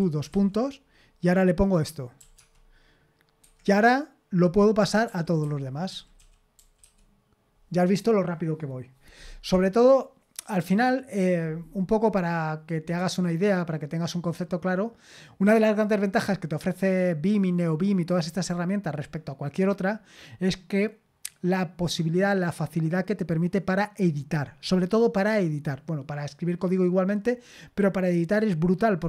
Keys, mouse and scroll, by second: 0.0-0.8 typing, 2.3 `, 3.4 Escape, 4.8-7.0 typing.